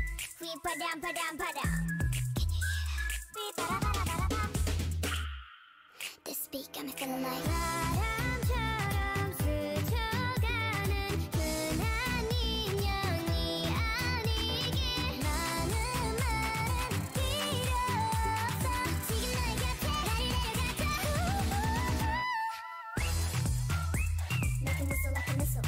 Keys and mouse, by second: 1.3 g, 1.9 a, 2.1 l, 2.4 g, 3.5 a, 3.7 l, 4.9 l, 5.3 r, 7.1 r, 8.0 r, 9.6 g, 11.6 r, 12.4 g, 13.0 click, 13.9 a, 14.1 l, 15.3 g, 17.8 g, 18.8 a, 19.1 a, 19.4 g, 20.6 g, 21.6 g, 22.6 r, 24.8 s.